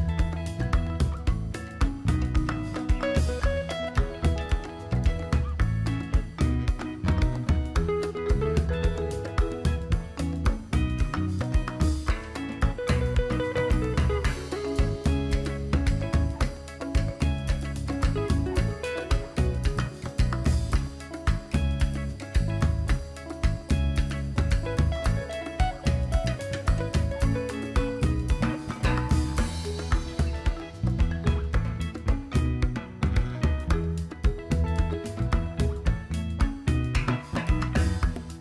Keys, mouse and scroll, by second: 0.1 alt+click, 0.4-0.8 alt+scroll down 1, 0.9 alt+scroll up 1, 1.3 alt+click, 1.7 alt+scroll down 1, 2.4-3.2 alt+scroll down 1, 3.3 click, 4.3 click, 5.1 scroll down 2, 5.6 click, 6.7-13.5 drag, 22.5 click, 38.2 click.